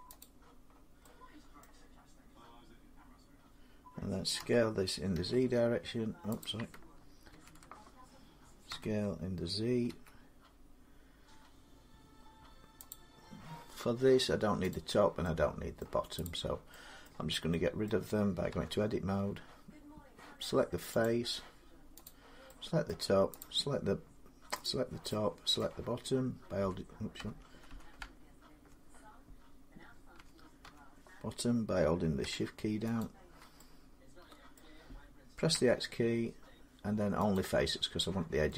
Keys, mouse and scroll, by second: 0.1 click, 1.5 middle click, 4.2 s, 5.0 x, 6.3 click, 7.1 ctrl+z, 8.5 typing, 9.7 z, 12.7 click, 13.7-15.6 drag, 15.6 middle click, 16.9 middle click, 17.7 middle click, 18.4 Tab, 20.9 click, 21.9 click, 22.7 middle click, 23.2 click, 24.5 click, 25.4 middle click, 25.5 Tab, 26.0-26.5 Tab, 27.1 Tab, 27.6 Tab, 27.8-28.6 Tab, 30.0 Tab, 30.5 Tab, 32.8 shift+click, 34.4 middle click, 35.4 x, 37.2 click.